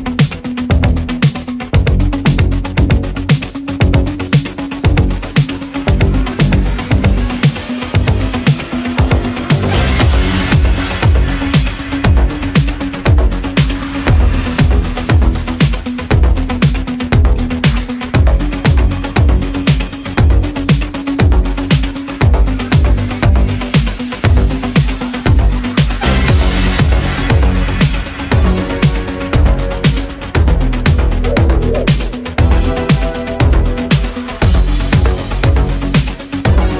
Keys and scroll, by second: 6.6 ctrl+z, 14.9 ctrl+z, 24.2 ctrl+z, 24.5 ctrl+z, 30.4 ctrl+z, 32.2 ctrl+z, 32.7 space.